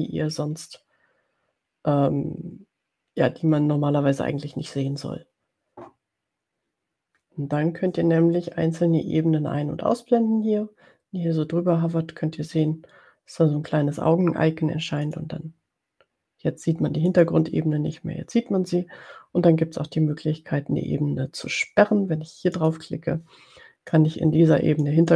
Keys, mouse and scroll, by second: 3.4 middle click, 15.0 click, 17.0 click, 22.8 click, 23.9-25.1 drag.